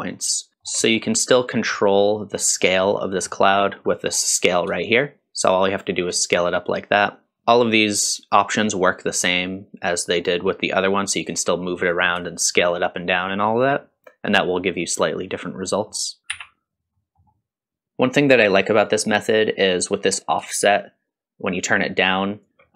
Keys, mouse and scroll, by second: 0.5 alt+z, 0.5 shift+middle click, 0.5 scroll down 2, 0.8 scroll down 1, 1.1 middle click, 1.7 middle click, 2.6 middle click, 3.0 scroll up 1, 3.3 middle click, 3.7 scroll up 1, 3.9 middle click, 4.9-7.3 shift+drag, 7.6-13.8 shift+drag, 15.7 middle click, 16.2 click, 16.3 m, 16.9 middle click, 17.8 middle click, 17.8-18.5 scroll down 2, 20.5-22.7 shift+drag.